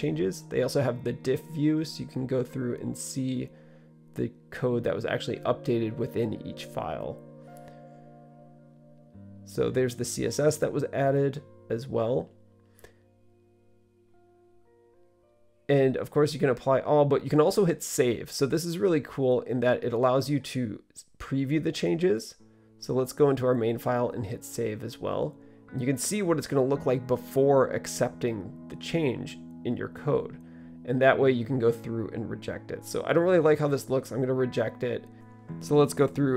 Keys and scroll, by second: 8.8 typing, 18.8 super+r.